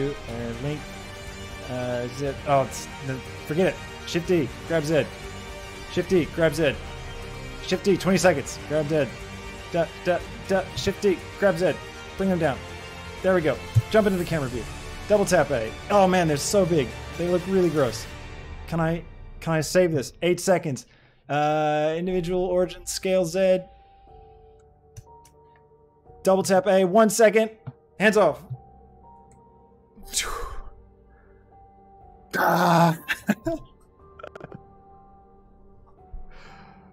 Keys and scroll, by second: 3.7 shift+d, 4.1 Escape, 4.5 z, 5.6 shift+d, 5.9 Escape, 6.3 z, 7.8 Escape, 8.1 z, 10.7 shift+d, 11.1 Escape, 11.4 z, 13.6 KP_0, 14.4 a, 22.8 z, 25.4 a.